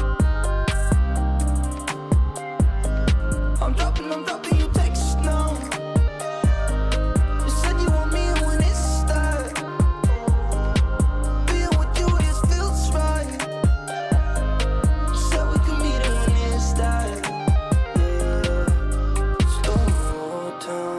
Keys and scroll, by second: 2.9 ctrl+g, 4.0 ctrl+space.